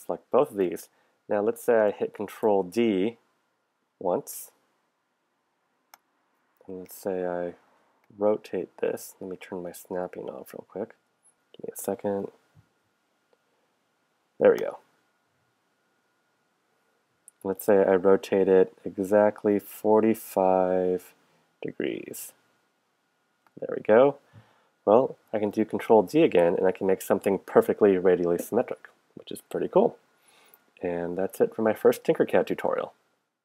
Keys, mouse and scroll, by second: 2.3 ctrl+d, 5.9-8.3 drag, 10.0 click, 11.0 click, 11.9 f, 15.3-20.8 drag, 21.5 click, 22.1-23.6 drag, 25.9 ctrl+d.